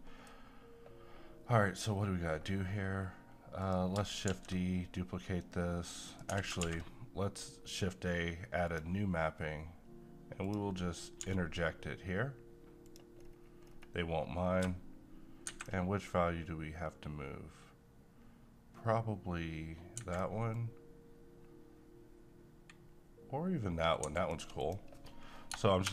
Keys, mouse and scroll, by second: 0.0-2.0 middle drag, 2.0-3.6 scroll down 1, 3.6 click, 4.3 d, 6.1 click, 6.3 x, 6.6 shift+a, 8.6 click, 12.9 click, 13.2-14.6 scroll up 1, 14.6 click, 15.5 shift+Escape, 16.1-20.0 shift+drag, 20.0 shift+Escape, 20.5-24.0 shift+drag, 24.0 shift+Escape, 24.6 click, 25.8 3.